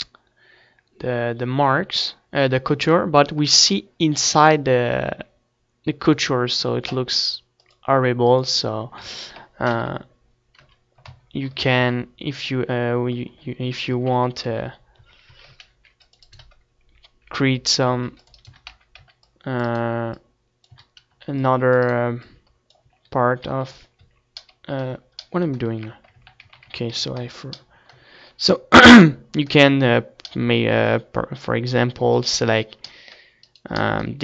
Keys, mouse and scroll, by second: 6.7 middle click, 7.6-9.1 drag, 9.0 ctrl+s, 9.7 KP_7, 10.7 KP_Decimal, 11.7 middle click, 11.9 z, 13.9 Tab, 14.5 a, 15.0 a, 15.2 a, 15.6 ctrl+r, 16.1 click, 16.3-18.1 right drag, 16.3 a, 17.9 ctrl+r, 18.1 click, 18.5-20.1 right drag, 18.5 a, 19.0 c, 20.7 a, 21.0 c, 21.3 click, 21.9 right click, 22.8 z, 23.4 z, 23.6-25.6 middle drag, 23.9 z, 26.1 ctrl+z, 26.4 ctrl+z, 26.7 ctrl+z, 26.9 ctrl+z, 27.3 ctrl+z, 28.3-29.5 middle drag, 31.1 middle click, 32.0-33.7 drag, 33.3 right click, 33.8-34.2 middle drag, 33.9 z.